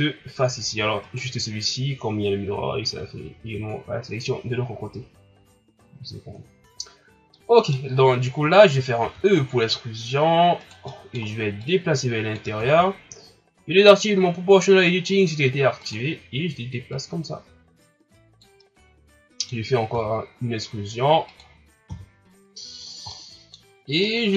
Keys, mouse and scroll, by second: 0.9 shift+scroll down 4, 1.0 right click, 6.2-7.3 scroll down 2, 7.3 middle click, 7.9-9.0 scroll up 3, 9.0 e, 10.8 scroll up 1, 10.8 middle click, 11.6 click, 12.5 ctrl+z, 15.8 click, 16.9-18.6 drag, 18.6-19.9 middle drag, 19.9 e, 21.8 KP_1, 22.8 scroll down 3, 23.0 middle click, 23.6-24.0 scroll up 5, 24.0-24.3 middle drag.